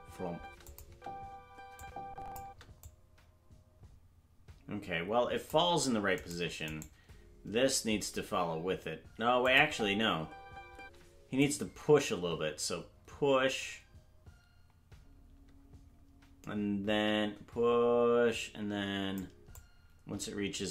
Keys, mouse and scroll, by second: 0.6 click, 0.6 space, 0.8 space, 1.8 click, 2.4 space, 2.8-5.5 drag, 6.2 right click, 6.7 right click, 9.4-9.7 drag, 9.6 space, 11.4-19.1 drag, 11.4 space, 19.5-20.5 drag.